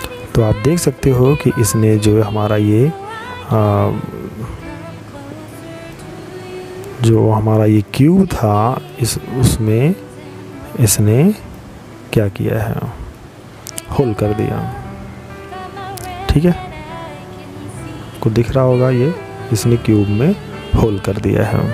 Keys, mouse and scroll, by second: 3.7 click, 9.9 middle click, 11.4-12.3 scroll up 5, 12.3 middle click, 20.3 middle click.